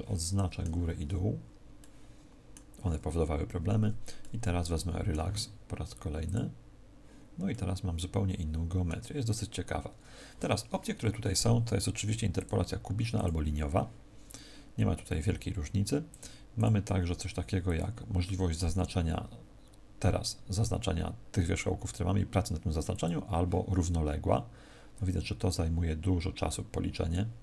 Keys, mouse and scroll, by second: 0.9 b, 4.1 middle click, 6.2 click, 7.4 middle click, 12.3 click, 16.0 click, 17.6 click.